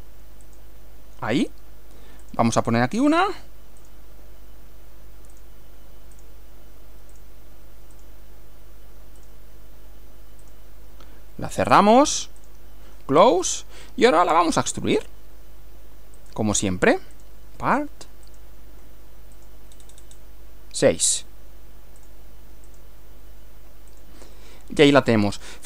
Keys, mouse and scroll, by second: 0.5 click, 2.3 click, 3.0 click, 3.9 click, 5.4 click, 6.2 click, 7.1 click, 8.0 click, 9.2 click, 10.5 click, 12.5 click, 13.5 click, 14.3-15.3 middle drag, 16.2 click, 17.1 click, 18.3 click, 19.4 click, 22.1 click, 22.7 click, 23.9 click, 24.4-25.6 middle drag.